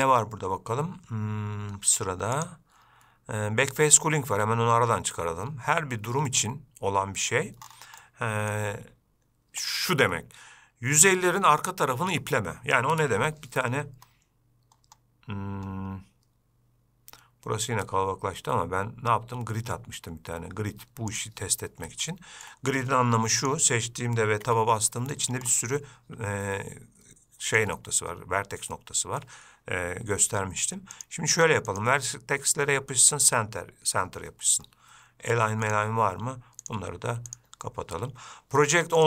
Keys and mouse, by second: 2.6-7.2 drag, 8.3-8.8 middle drag, 21.4 click, 22.3-22.7 shift+middle drag, 24.7 Tab, 25.1 middle click, 27.8 click, 29.0 middle click, 31.2-34.3 drag, 35.9-37.8 drag.